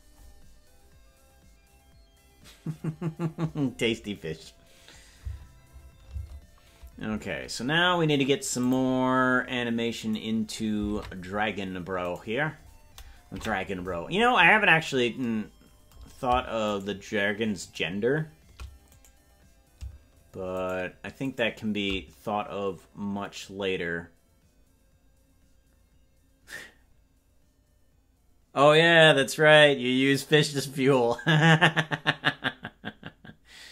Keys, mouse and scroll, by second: 6.2 space, 8.6 click, 10.1 right click, 10.9 ctrl+Tab, 12.2-13.3 right drag, 13.3 KP_Decimal, 14.1 scroll down 1, 14.1-14.5 scroll down 9, 14.5 scroll up 2, 14.5 scroll down 1, 14.7 scroll up 1, 14.8 scroll down 2, 16.9 shift+right click, 19.1 right click, 20.8-22.5 shift+right drag.